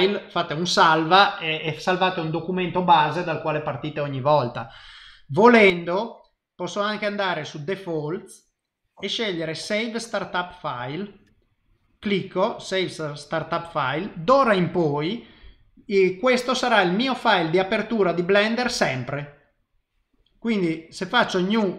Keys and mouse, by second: 0.0 click, 15.8 click, 18.9 click.